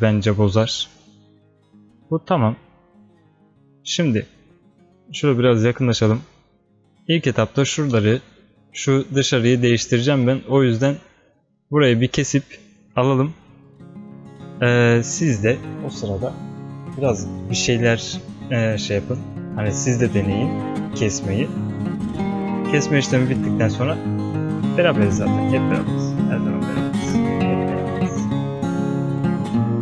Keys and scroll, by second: 29.4-29.8 typing.